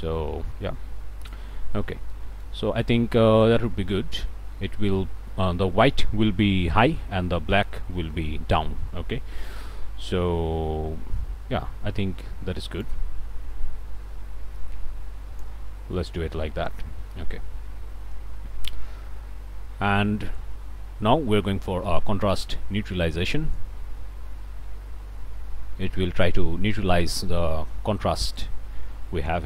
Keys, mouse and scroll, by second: 1.5 scroll up 1, 2.1 click, 2.6 scroll down 1, 2.8 middle click, 3.2 click, 12.8-15.6 drag, 22.2-27.4 drag.